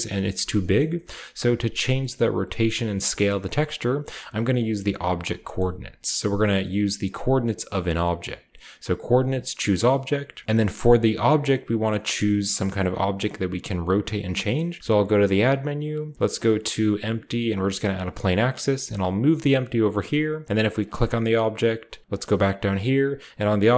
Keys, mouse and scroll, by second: 0.5-1.9 scroll down 1, 0.8-1.9 shift+middle drag, 3.9-5.5 middle drag, 3.9-5.1 scroll down 1, 5.1-5.7 scroll down 1, 6.3 shift+click, 9.2 click, 9.5-10.4 scroll down 1, 14.8 shift+a, 17.7-20.0 drag, 18.5 g, 20.4-22.0 scroll up 1, 20.7-22.1 middle drag, 22.0-23.7 scroll down 1.